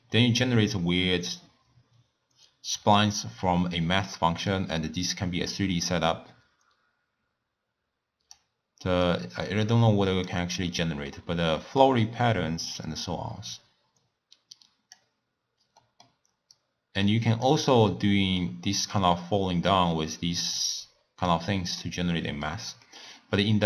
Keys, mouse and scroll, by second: 0.0-2.9 middle drag, 4.5-7.5 drag, 9.0-10.7 drag, 10.7-11.1 scroll down 2, 11.1-12.9 middle drag, 12.9-15.8 drag, 15.8 middle click, 16.5-17.9 drag, 17.9-19.7 middle drag, 19.7-21.9 drag, 21.9-23.6 middle drag.